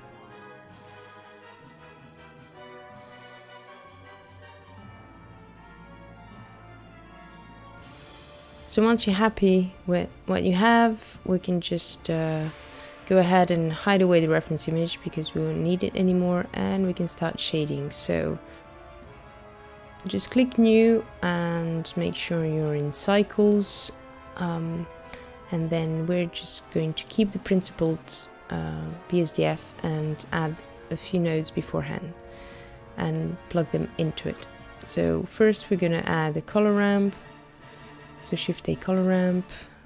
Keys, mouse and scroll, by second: 1.3 middle click, 1.6 click, 1.8 ctrl+b, 4.2 click, 4.5 scroll down 2, 4.9 middle click, 6.2 shift+middle click, 7.4-7.8 scroll down 3, 9.3 Tab, 9.3 shift+middle click, 9.7 shift+middle click, 10.0-10.4 scroll up 5, 13.2 scroll up 1, 13.7 click, 13.8 scroll down 2, 23.2 scroll up 2, 23.4 scroll down 1, 25.3 click, 27.3 middle click, 28.5-29.5 scroll up 4, 29.5 middle click, 29.5-30.6 scroll up 5, 31.6 click, 34.5 click, 35.3 shift+a.